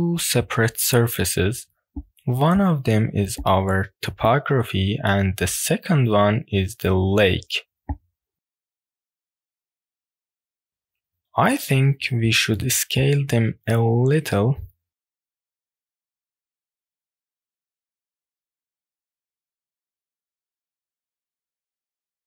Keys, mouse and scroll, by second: 0.9 scroll up 2, 1.1-1.5 middle drag, 1.8 scroll down 2, 2.0 middle click, 2.3 click, 2.9-3.2 middle drag, 3.6 ctrl+z, 4.1 ctrl+z, 4.3-4.6 middle drag, 5.0 drag, 5.1 middle click, 5.7-7.8 drag, 7.6 right click, 7.8 middle click, 8.1 click, 8.3-8.7 shift+middle drag, 8.9 middle drag, 9.2 shift+middle click, 9.5-9.9 middle drag, 10.1 click, 10.4 scroll up 2, 10.7 shift+middle click, 10.7 scroll down 2, 10.8 click, 11.2-11.9 scroll down 2, 13.9 Tab, 15.1 s, 16.6 KP_6, 16.8 KP_Enter, 17.6-19.2 scroll down 6, 19.2 click, 19.6 click, 20.2 Tab, 20.6 scroll up 2, 21.0-21.4 middle drag, 21.8 click.